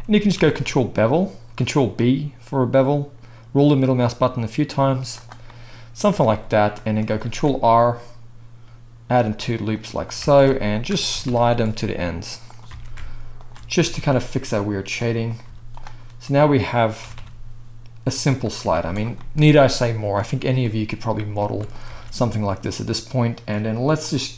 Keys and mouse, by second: 0.4 ctrl+b, 6.3-10.7 middle drag, 7.2 ctrl+r, 10.2 alt+a, 10.7 alt+shift+click, 10.8 alt+middle click, 11.1 g, 12.7 alt+a, 13.4 alt+shift+click, 13.7 g, 15.4 z, 17.0 g, 18.6 z, 21.8 alt+a, 24.0 drag, 24.1 middle click.